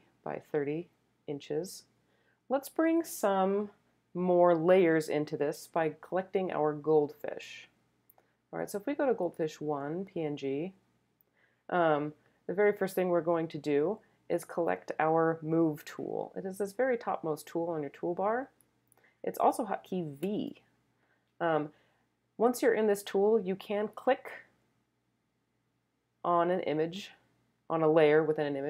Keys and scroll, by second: 20.2 v.